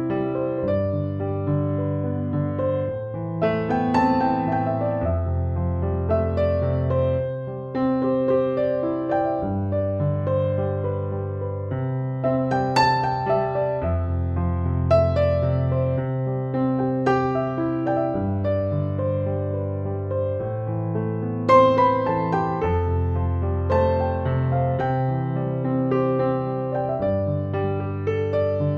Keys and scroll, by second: 13.1 typing.